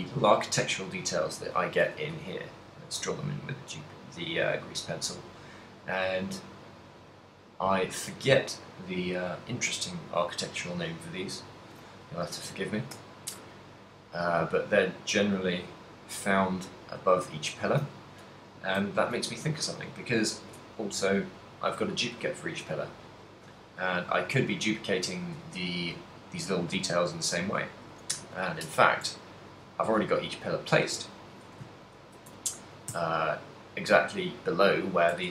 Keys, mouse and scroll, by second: 0.1 a, 2.0 d, 2.3 click, 5.1 d, 5.4 click, 5.4 d, 8.3 d, 8.6 click, 8.6 d, 11.8 d, 13.1 d, 13.6 d, 13.7 right click, 19.0 shift+middle click, 21.8 right click, 23.1 shift+middle click, 24.1 a, 24.6 right click, 28.1 KP_3, 29.1 shift+middle click, 30.1 z, 31.9 ctrl+middle click, 32.6 a, 33.1 z, 34.1 right click, 35.2 Tab.